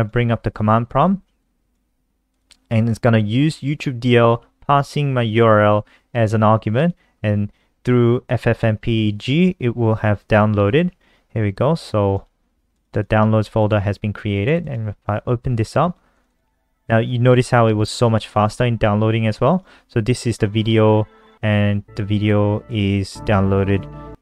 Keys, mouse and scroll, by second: 9.6 ctrl+KP_3, 11.8 click, 12.8 click, 13.5 click, 14.5 click, 16.0 click, 16.2 click, 17.1 click, 17.3 click.